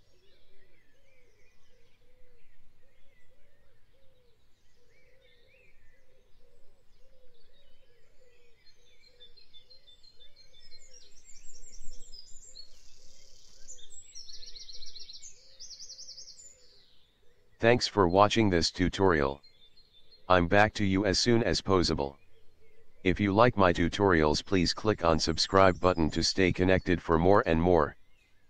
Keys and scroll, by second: 2.4 v, 6.2 ctrl+a, 6.5 2, 6.8 Return, 16.8 1, 17.1 Return, 19.6 shift+m, 20.5 v.